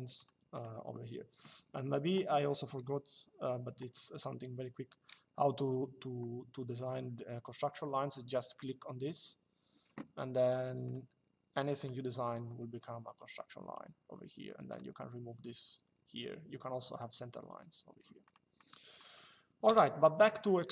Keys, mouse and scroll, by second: 8.3 click, 10.1 click, 12.1 Escape, 14.4 click, 18.0 click, 20.3 click.